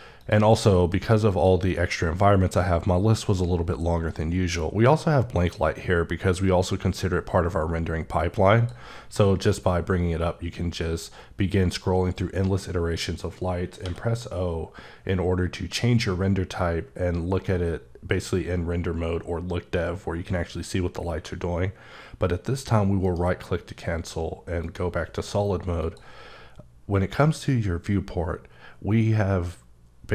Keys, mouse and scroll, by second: 0.2 click, 1.3 click, 8.6 click, 9.7-11.4 scroll up 6, 11.4-12.3 scroll up 4, 12.5-13.8 scroll up 2, 13.8 q, 14.6-16.5 scroll up 6, 17.0-18.2 scroll up 2, 18.2 scroll up 1, 19.3-19.8 scroll up 1, 19.8 scroll up 1, 23.0 right click, 24.6 click, 25.8 click.